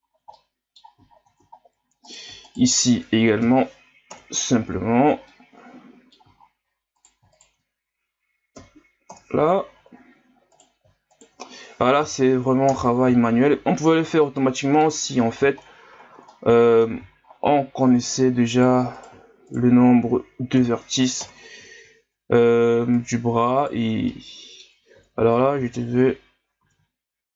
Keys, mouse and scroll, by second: 0.4-1.1 middle drag, 1.2-1.7 shift+scroll down 4, 2.0 right click, 2.4 shift+right click, 3.4 m, 4.9 ctrl+scroll down 6, 5.3-6.4 middle drag, 6.4-6.7 shift+scroll up 6, 7.0 right click, 7.3 shift+right click, 8.5 m, 9.7 shift+scroll up 4, 10.5 right click, 12.0 m, 13.6 shift+scroll up 2, 14.3 middle click, 15.1-15.5 scroll down 2, 15.5-16.0 shift+scroll up 10, 16.3 middle click, 17.2 shift+scroll up 2, 18.0-19.6 right drag, 20.5 m, 21.8 shift+scroll up 4, 23.0-24.1 right drag, 24.1 middle click, 25.0 ctrl+z, 25.6 ctrl+z.